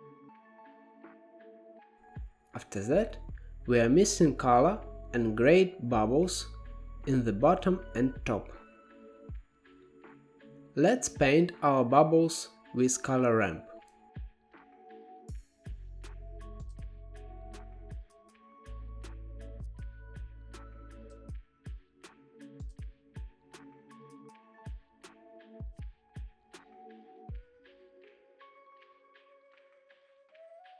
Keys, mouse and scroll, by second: 1.2-3.1 middle drag, 3.1-4.0 scroll down 6, 4.0-5.3 drag, 5.3 g, 7.1 click, 7.9 g, 10.3-11.4 scroll up 8, 11.4 click, 12.0 g, 13.1 click, 13.6 shift+d, 14.8-15.2 scroll up 1, 15.2-15.9 drag, 15.9 scroll up 1, 16.6-17.1 scroll up 1, 17.1 click, 17.4-19.2 drag, 22.8-24.1 middle drag, 24.1-25.1 drag, 25.1 middle click, 25.8 scroll up 5, 26.3-30.7 drag.